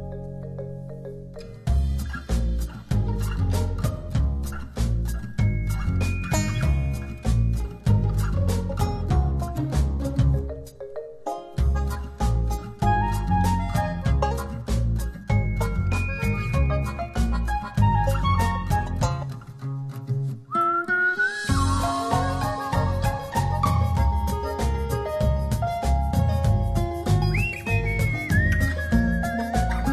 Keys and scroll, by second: 0.5 space, 14.3 space, 16.0 space.